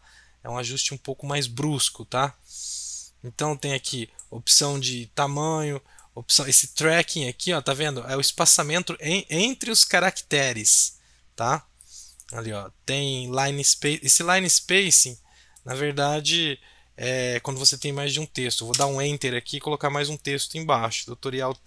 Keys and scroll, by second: 18.7 Return.